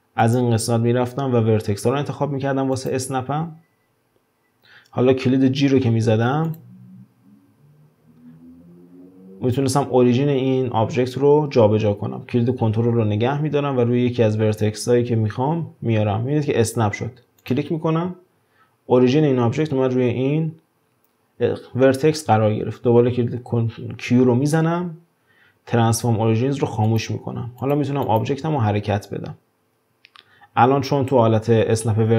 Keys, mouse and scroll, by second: 0.2-3.2 drag, 6.5 click, 7.4 g, 24.6 q, 27.6 drag, 28.0 click, 29.0 g.